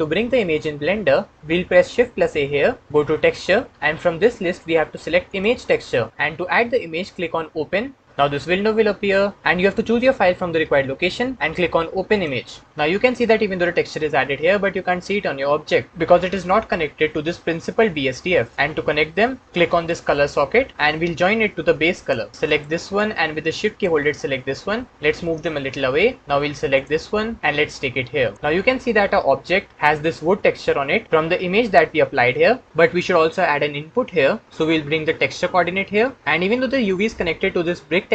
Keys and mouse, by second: 2.0 shift+a, 19.9 click, 20.9-22.1 drag, 22.1 middle click, 22.6-23.6 middle drag, 23.7-24.9 shift+middle drag, 25.8 click, 26.2-27.5 drag, 27.6 click, 35.1 click.